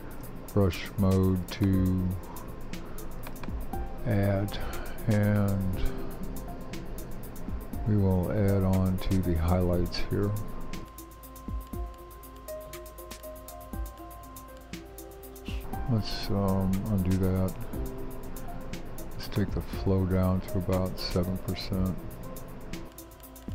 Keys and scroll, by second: 17.3 super+z.